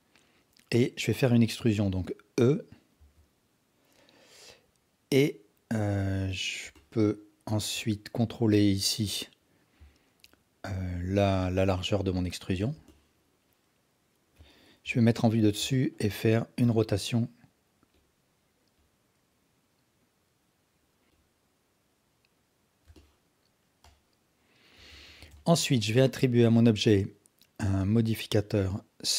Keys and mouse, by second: 3.0 e, 6.7 alt+click, 8.5-12.5 drag, 12.9-14.4 alt+drag, 14.8 KP_7, 15.8 alt+shift+click, 16.6 r, 18.9 click, 21.1 KP_7, 21.4 click, 23.1 alt+click, 24.0-24.8 alt+drag, 24.9 Tab, 25.3 alt+shift+click, 25.6 alt+drag, 26.6-29.1 drag.